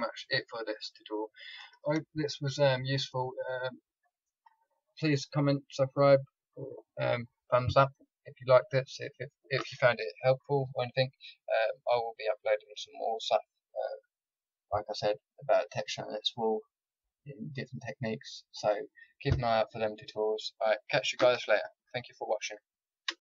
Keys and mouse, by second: 0.7 middle click, 1.1-23.0 middle drag, 23.0 alt+F9.